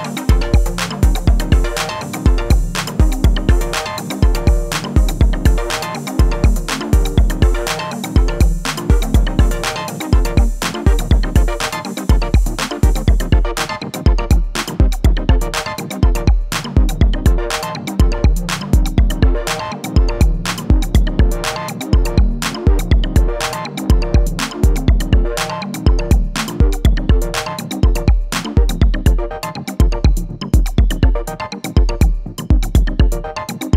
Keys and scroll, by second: 21.5-23.4 typing.